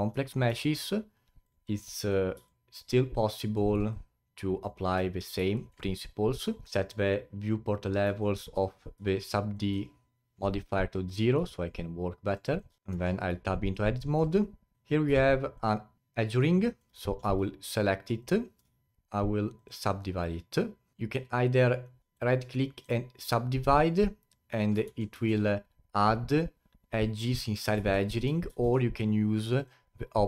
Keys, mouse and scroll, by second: 1.4 click, 2.0 click, 2.4-3.5 alt+drag, 3.5-3.9 alt+middle drag, 3.9-5.2 alt+drag, 5.5-5.9 alt+middle drag, 5.9-6.7 alt+drag, 8.2-8.6 alt+middle drag, 8.6 click, 9.1-11.0 alt+drag, 11.0-11.5 scroll up 5, 11.5-12.8 alt+drag, 12.8 alt+middle click, 12.9 Tab, 13.4 alt+click, 14.0-14.4 alt+middle drag, 14.4-15.2 scroll up 7, 14.7 2, 15.2-18.2 alt+drag, 18.9 right click, 20.9 alt+middle click, 22.0 ctrl+z, 22.1-22.8 right drag, 27.7 ctrl+z, 28.1 ctrl+z, 28.5 ctrl+z, 29.5-30.2 drag.